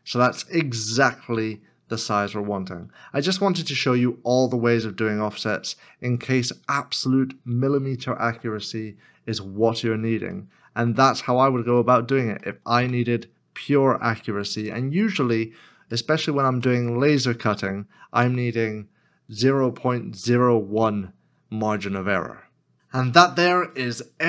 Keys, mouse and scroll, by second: 1.6 middle click, 8.3 x, 8.8 scroll down 1, 10.3 shift+middle click, 11.2 scroll down 1, 11.9 middle click, 12.4 shift+middle click, 15.9 shift+middle click, 16.6 shift+middle click.